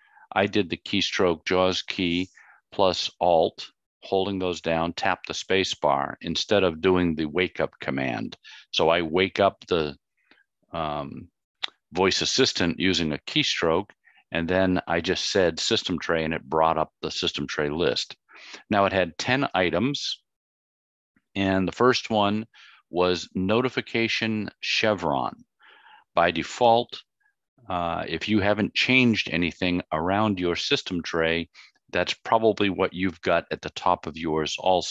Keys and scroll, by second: 0.0 alt+Insert, 4.6 space.